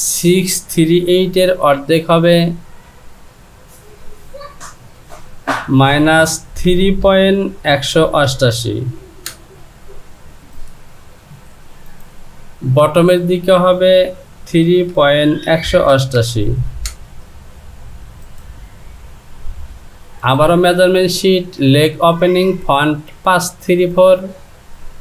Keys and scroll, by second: 4.7 Down, 5.8 KP_Subtract, 6.7 KP_3, 13.2 Down, 16.9 Return.